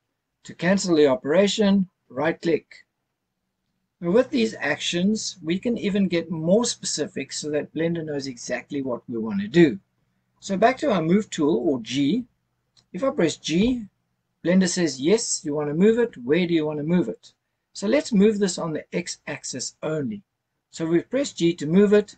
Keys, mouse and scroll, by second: 13.6 g.